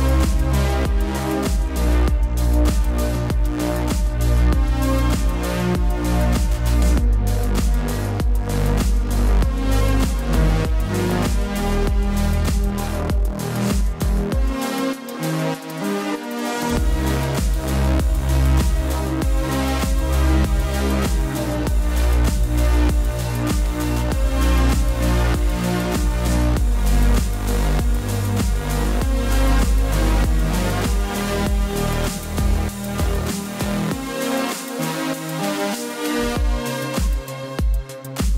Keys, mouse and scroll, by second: 7.1 typing, 7.3 click, 10.5 Caps_Lock, 10.6 click, 11.9 click, 12.8 click, 14.0 right click, 17.3 right click, 17.5 click, 18.9 click, 22.8 click, 31.3 click, 33.5 click, 38.0 click.